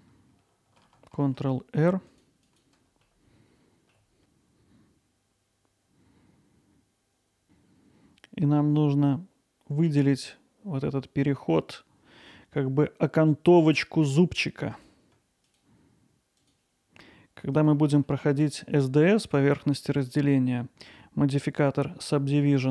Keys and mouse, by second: 1.2 ctrl+r, 2.4 click, 2.7 alt+middle click, 3.4 click, 3.4 1, 4.3 g, 4.3 z, 5.1 click, 5.5 alt+middle click, 6.4 g, 7.0 y, 14.8 click.